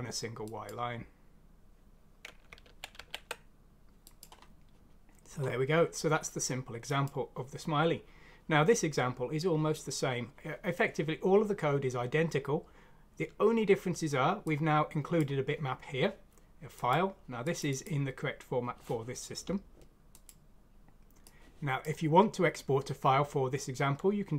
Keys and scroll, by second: 2.6 ctrl+z, 2.9 ctrl+z.